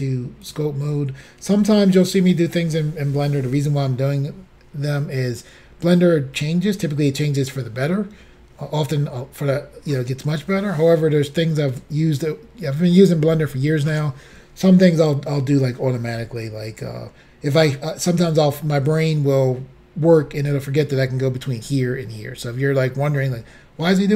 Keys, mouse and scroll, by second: 0.5 click.